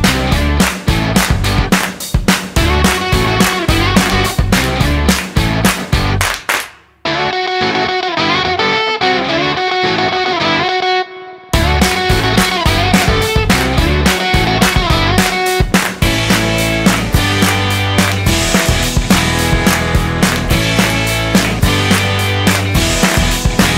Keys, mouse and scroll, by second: 0.7-1.3 scroll up 13, 1.3 middle click, 2.0 scroll up 3, 3.6 click, 9.3 click, 13.2-13.9 scroll down 13, 14.1 middle click, 14.7-15.9 scroll up 9, 15.9-16.8 scroll up 2, 18.7 middle click, 20.7 middle click, 21.8 click.